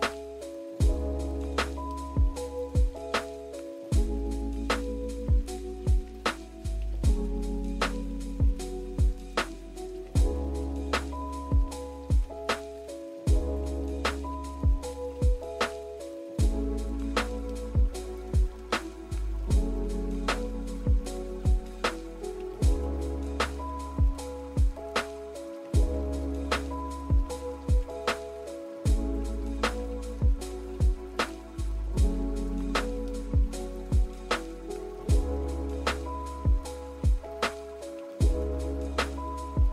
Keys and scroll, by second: 1.5 g, 7.4 z, 25.1 g, 38.6 z.